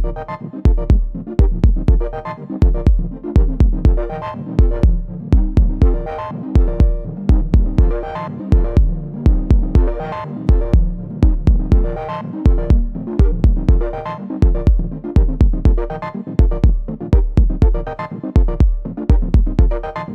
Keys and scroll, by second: 4.1 ctrl+r, 10.1 ctrl+r.